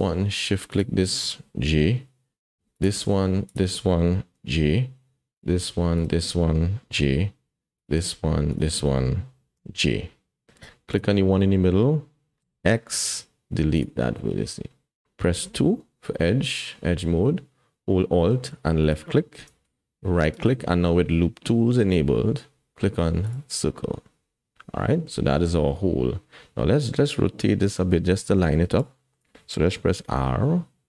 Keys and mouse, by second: 1.7 j, 2.7 click, 3.5 shift+click, 4.4 j, 7.2 j, 7.8 click, 8.5 shift+click, 9.5 j, 12.4 x, 15.4 2, 18.8 alt+click, 20.4-23.3 drag, 29.0 shift+middle click, 30.4 r.